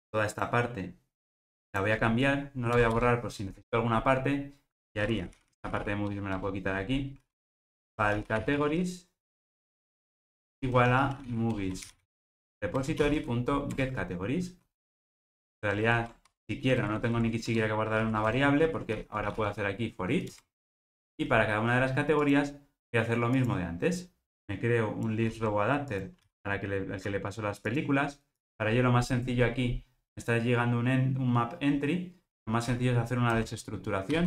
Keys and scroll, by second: 12.9 Return, 16.8 alt+shift+Right, 25.3 super+c.